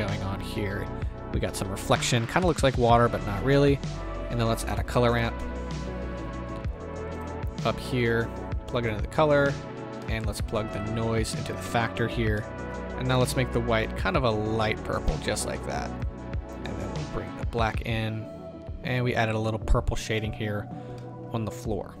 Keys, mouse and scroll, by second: 10.2-11.6 middle drag, 11.6-12.7 drag, 16.1-20.2 drag, 20.2-22.0 middle drag.